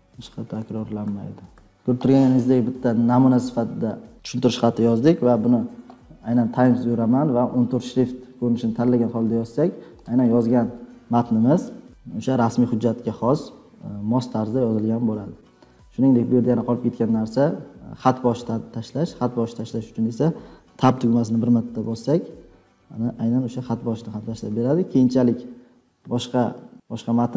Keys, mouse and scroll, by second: 0.0-2.0 typing, 10.0 click, 11.2 Delete, 21.7 Tab, 24.7-26.7 drag.